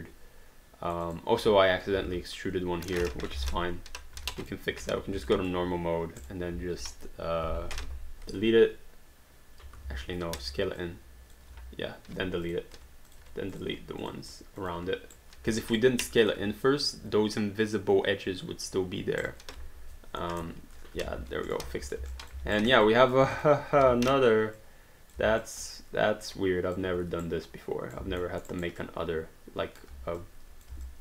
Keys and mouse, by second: 1.0 alt+click, 2.0 ctrl+z, 3.3 ctrl+y, 4.2 q, 4.4 click, 4.8 1, 5.3 alt+click, 6.2 click, 8.3 Delete, 10.3 ctrl+z, 10.8 click, 11.5 q, 12.4 click, 12.7 Delete, 13.1 click, 13.2 Delete, 13.6 click, 13.7 Delete, 14.0 click, 14.2 Delete, 14.6 click, 14.8 Delete, 15.1 right click, 16.8 shift+click, 19.2 click, 20.3 Return, 21.0 q, 21.5 click, 21.7 3, 22.1 alt+click, 22.4 alt+d, 22.5 alt+right click, 22.9 alt+click, 23.3 click, 23.8 r, 24.6 click, 25.4 alt+click, 27.3 right click, 28.4 alt+middle click, 28.6 alt+right click, 28.8 alt+click, 30.2 click, 30.9 alt+click.